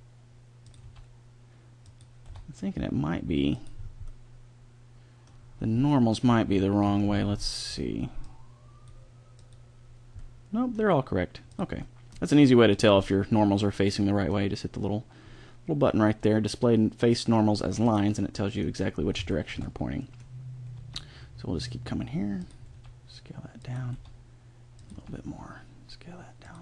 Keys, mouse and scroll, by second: 0.8 s, 2.3 e, 8.2-9.3 drag, 10.2-11.3 middle drag, 11.5 middle click, 11.9 middle click, 13.0 middle click, 13.2 middle click, 13.6 middle click, 14.0 middle click, 18.3 middle click, 19.2-21.6 middle drag, 20.8 e, 22.7 s, 23.9 e, 24.9 s.